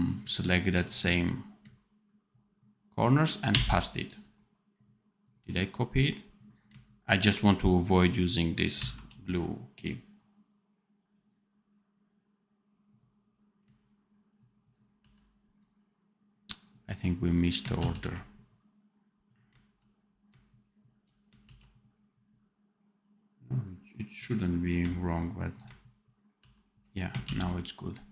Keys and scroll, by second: 8.7 ctrl+c, 14.9 ctrl+v, 17.7 ctrl+z, 21.3 ctrl+c, 26.3 ctrl+v, 27.2 ctrl+s.